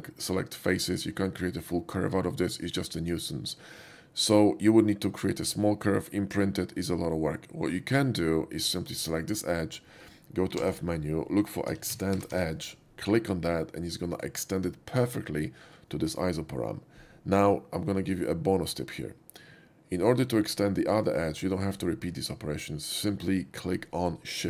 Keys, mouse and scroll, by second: 9.1 click, 11.8 e, 11.9 x, 12.2 t, 12.4 e, 14.2 click, 20.0 click.